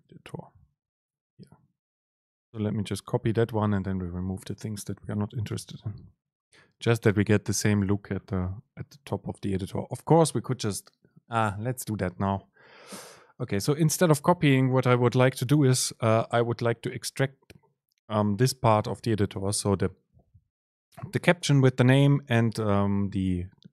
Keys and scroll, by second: 3.5 Up, 3.7 Down, 4.2 shift+Right, 5.6 super+c, 17.1 shift+Down.